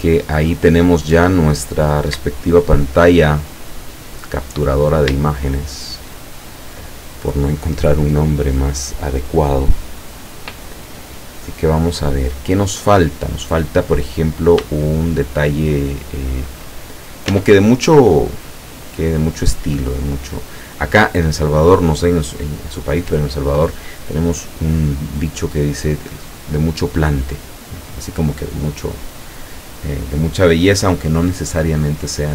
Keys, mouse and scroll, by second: 0.0-0.5 middle drag, 1.4 scroll down 1, 1.7-2.0 scroll up 1, 2.3 shift+scroll up 1, 3.8 click, 4.7-5.0 scroll down 1, 5.3 shift+middle click, 5.8 shift+middle click, 11.8-13.8 middle drag, 14.2-14.6 scroll up 1, 14.8 shift+middle click, 15.7-16.8 shift+middle drag, 17.0 shift+right click, 17.4 shift+Tab, 20.3 click.